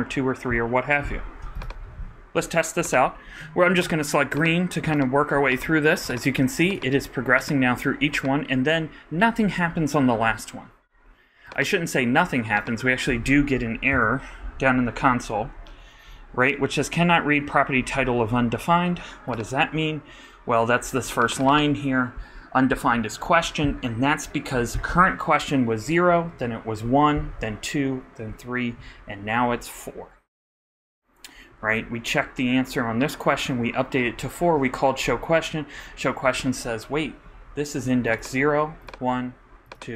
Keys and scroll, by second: 13.9 alt+super+i.